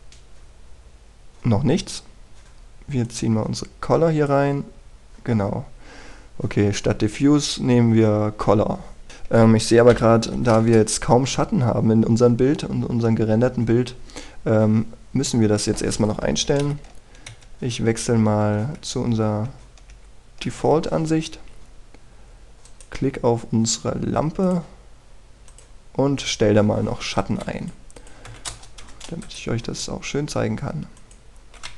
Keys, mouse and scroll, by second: 0.1-1.3 scroll up 1, 2.4-4.0 scroll down 1, 4.0-5.9 drag, 6.4 scroll down 1, 8.0 scroll up 1, 9.1 click, 11.3 KP_5, 12.5-13.7 scroll down 1, 13.7-16.8 scroll up 1, 17.6 ctrl+Right, 18.3 ctrl+Right, 19.1 ctrl+Right, 19.5 ctrl+Right, 22.3 Escape, 22.7-23.7 scroll down 1, 23.7 right click, 24.2-25.5 scroll up 1, 25.5 click, 27.3-28.1 scroll down 1, 28.1 click, 29.3 KP_2, 29.5 Return, 30.2 right click.